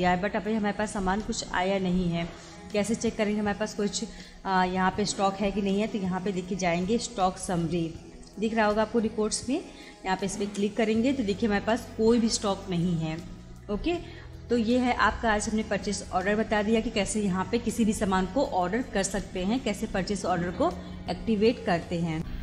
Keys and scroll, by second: 0.8 Escape, 1.9 Escape, 6.5 Up, 10.5 Return, 15.3 Escape.